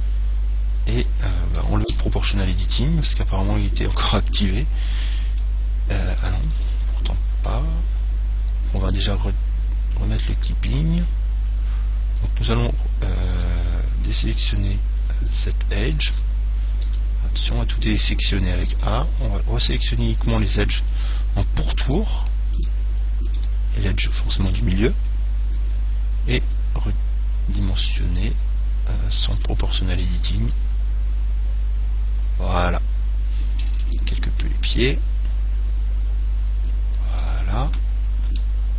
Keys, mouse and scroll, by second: 2.1 o, 5.7 s, 9.0 click, 10.9 right click, 12.7 c, 13.6-17.8 right drag, 17.1 a, 18.9-25.3 right drag, 26.6 s, 29.6 o, 30.8 s, 34.2-37.0 drag, 38.0-38.6 scroll up 1, 38.6-38.7 middle drag.